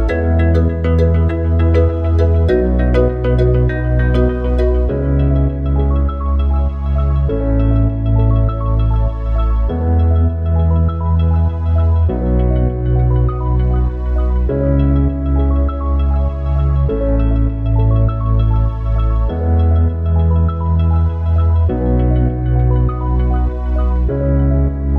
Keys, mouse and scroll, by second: 2.5-3.1 middle drag, 3.1-4.0 scroll down 6, 8.5 Tab, 10.1 click, 11.5 a, 13.3-16.8 right drag, 16.8-24.9 drag.